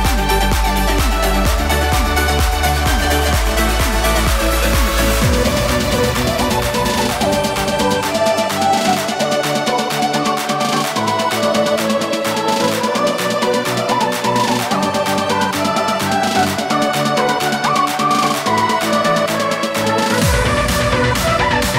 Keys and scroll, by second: 12.9 3, 13.7 alt+3.